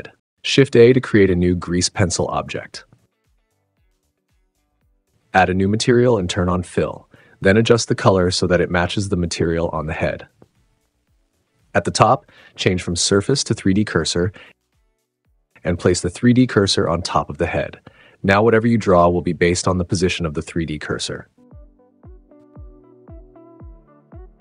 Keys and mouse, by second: 0.0 n, 0.4 shift+a, 3.7 click, 20.3 super+z, 23.6 super+z.